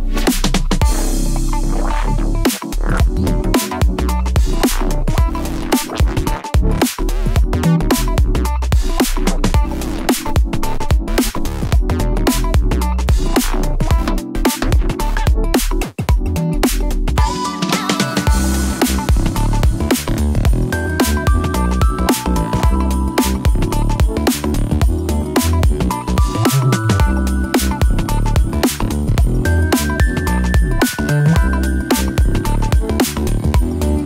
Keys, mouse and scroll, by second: 0.2 click, 0.8 click, 1.0 g, 1.2 g, 1.4 g, 2.0 click, 2.4 click, 2.7 g, 2.8 g, 3.5 click, 4.0-5.2 middle drag, 6.2 shift+click, 6.8 g, 6.9 g, 7.8 Escape, 8.3 g, 9.3 click, 9.6 click, 9.9 shift+click, 10.3 g, 11.3 click, 12.2-13.3 drag, 13.8 shift+click, 14.7 click, 15.4 g, 15.5 g, 16.0 click, 18.8 g, 20.2 click, 20.8 ctrl+z, 21.7 g, 22.3 click, 22.7 click, 23.2 g, 24.4 click, 24.7 click, 25.2 g, 25.3 g, 25.7 click, 26.0 g, 26.9 click, 27.3 click, 28.2 g, 29.8 click, 30.2 click, 30.3 g, 30.6 click, 31.0 g, 31.5 click, 32.1 click, 33.5 g, 33.6 g.